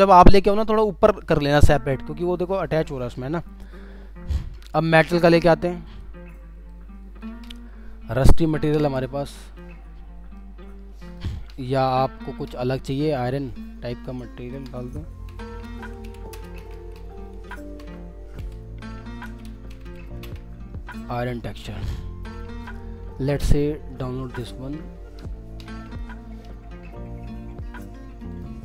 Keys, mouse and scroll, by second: 3.7 alt+scroll down 1, 7.4-8.7 alt+scroll down 1, 9.7 alt+scroll down 1, 15.0-20.5 typing, 28.3 right click.